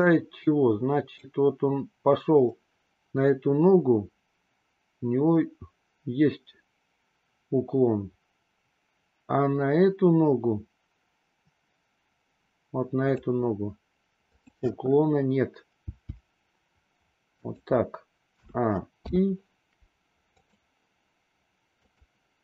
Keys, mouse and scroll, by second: 1.1-13.3 drag, 14.1 click, 15.7 g, 18.2 a, 19.0 i, 20.4 click, 21.8-22.4 drag.